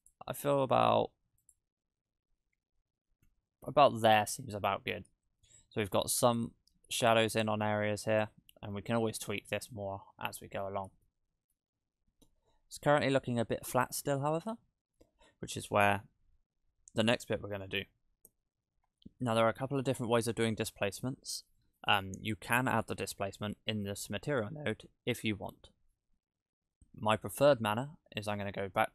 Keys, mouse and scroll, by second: 0.0 click, 1.4 click, 4.7-5.5 scroll up 3, 5.5 scroll up 1, 5.5 shift+middle click, 6.1-6.4 scroll up 4, 7.1 scroll down 5, 7.4 shift+middle click, 7.9-8.5 scroll up 2, 8.7 shift+middle click, 9.9-11.1 scroll down 9, 10.9 scroll up 1, 11.1 shift+middle click, 11.8-12.4 scroll up 2, 12.4-13.0 scroll down 5, 13.3 middle click, 14.5-15.8 scroll up 2, 16.0-16.9 scroll down 3, 19.2 click, 19.8 click, 22.5 middle click.